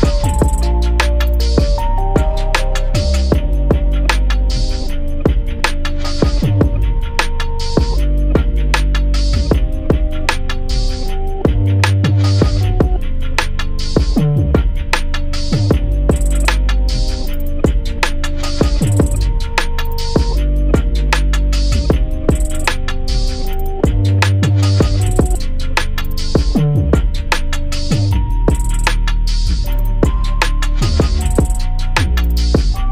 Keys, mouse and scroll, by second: 0.0 click, 0.3 scroll down 2, 0.8 r, 1.3 g, 2.4 shift+d, 3.1 r, 3.6 s, 4.1 g, 4.7 scroll down 7, 5.1 scroll up 2, 5.4 click, 5.7 click, 6.4 shift+d, 9.5 click, 9.9 shift+d, 11.0 s, 11.5 click, 11.7 s, 12.3 click, 12.9-13.3 scroll up 12, 13.3 scroll down 2, 13.7 click, 14.0 scroll down 1, 14.3 scroll up 1, 14.7 click, 15.3 click, 15.7 e, 15.8 r, 17.2 click, 17.4-18.1 scroll down 6, 18.1 click, 18.6 scroll down 1, 18.8 scroll up 8, 19.2 click, 19.8 shift+d, 20.7 s, 21.9 g, 23.3 click, 24.8 click, 25.1 scroll up 4, 26.0 s, 27.1 g, 28.5 click, 29.0-29.6 scroll down 2, 30.1 click, 31.1 click, 31.9 r.